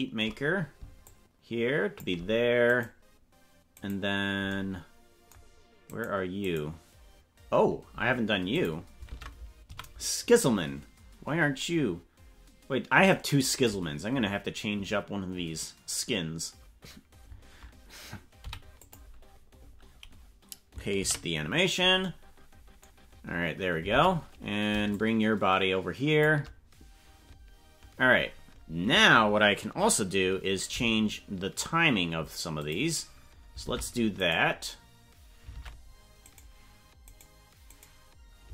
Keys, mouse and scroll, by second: 1.0-2.1 shift+drag, 2.7 right click, 3.9 right click, 5.9 right click, 6.4 right click, 8.5 click, 9.0 ctrl+Tab, 9.7 a, 20.9 ctrl+v, 23.9 ctrl+Tab, 24.9-26.2 shift+drag, 30.6 g, 33.6 ctrl+Tab, 34.2 right click, 35.5 ctrl+Tab, 36.2 right click, 37.1 right click, 37.7 right click.